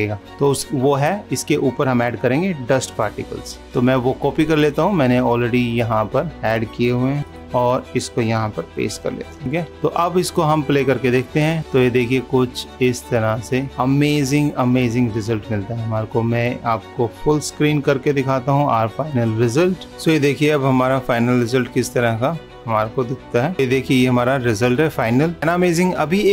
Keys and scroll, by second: 7.2 ctrl+c, 9.2 ctrl+v.